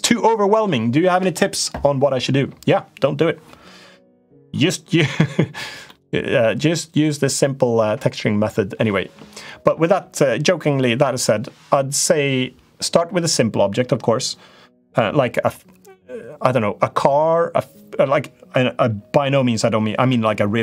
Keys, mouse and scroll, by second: 5.7 middle click.